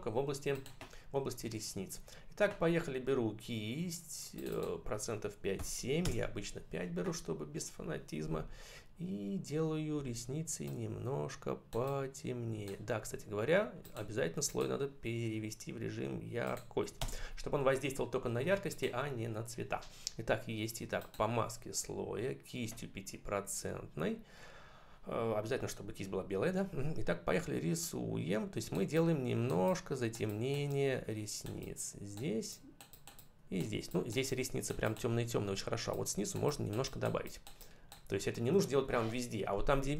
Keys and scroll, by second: 5.4 5, 5.9 Return, 9.8 [, 16.8 Return.